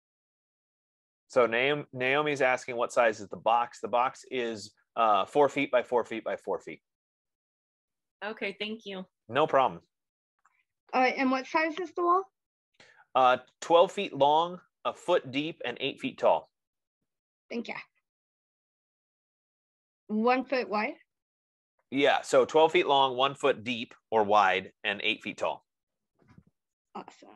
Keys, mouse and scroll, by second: 8.7 F15.